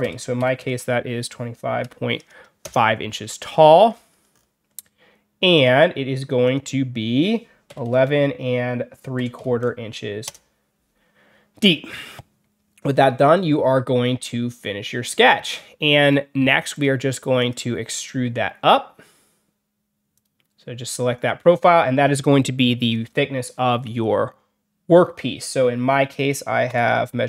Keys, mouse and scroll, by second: 3.3 alt+scroll down 2, 3.8 alt+scroll up 2, 3.9 alt+middle click, 4.2 alt+middle click, 5.4 click, 6.3 click, 13.1 click, 16.6 click, 17.3 click, 20.0 click, 26.6 ..